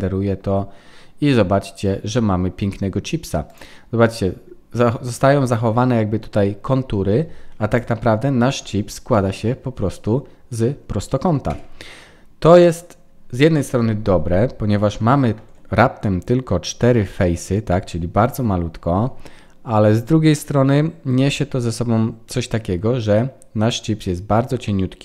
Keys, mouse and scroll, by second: 7.7 click, 8.6 Tab, 9.1 middle click, 22.2 middle click.